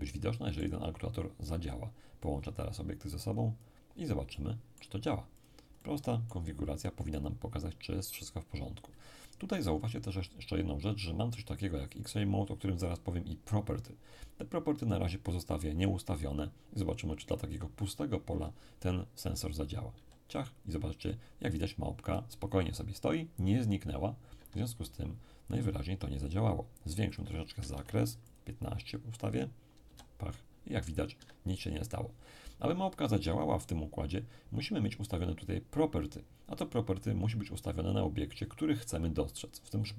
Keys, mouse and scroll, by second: 0.8-1.8 scroll down 1, 2.2-7.3 drag, 4.3-7.3 middle drag, 19.9 p, 24.3 Escape, 27.1 click, 27.6 1, 27.7 5, 28.3 click, 29.8 p, 31.1 Escape.